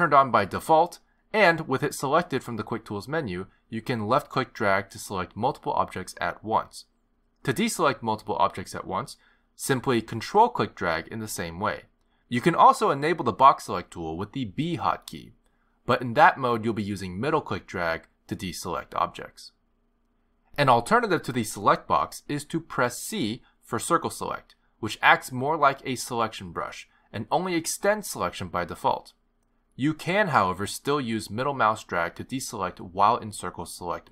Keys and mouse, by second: 3.9 click, 7.3 click, 8.3 click, 11.1 click, 12.5 ctrl+click, 15.0 b, 17.8 b, 24.0 c.